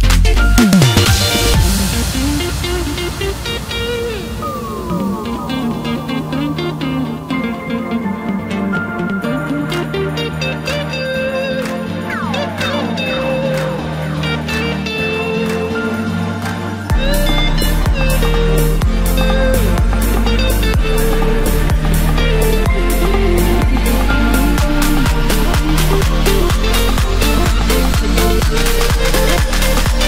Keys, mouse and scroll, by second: 0.5-1.6 scroll down 3, 1.6 scroll down 1, 1.8 s, 4.2 KP_3, 4.9-5.8 scroll up 4, 5.8 g, 10.6-11.1 scroll down 2, 11.1-12.2 scroll up 2, 12.2 e, 14.9-15.3 scroll down 1, 15.3-18.1 middle drag, 18.1-18.7 scroll down 3, 18.7 click, 19.3 scroll up 1, 19.5 scroll down 3, 19.7-22.0 middle drag, 22.0-22.8 scroll up 2, 22.8 ctrl+z, 24.2-25.9 middle drag, 25.9-26.7 scroll up 1, 26.7 ctrl+i, 27.8 h, 28.7 middle click, 29.4-29.9 scroll up 1, 29.9 2.